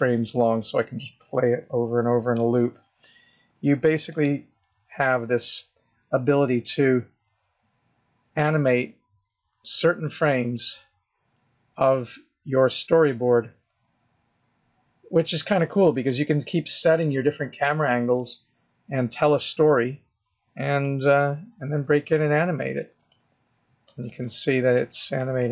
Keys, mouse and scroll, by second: 3.9 click, 6.6 scroll down 4, 7.7-8.7 scroll down 1, 8.7 scroll down 4, 9.5 scroll up 1, 10.2-11.0 scroll up 2, 11.0-11.7 scroll down 2, 11.8-12.7 scroll down 3, 12.7 scroll up 2, 14.4 scroll up 1, 15.0 scroll down 2, 15.9 shift+middle click, 16.9-18.1 scroll up 2, 20.7 middle click, 22.1-22.9 scroll up 6, 22.9 shift+middle click, 23.9 middle click, 23.9 scroll up 6.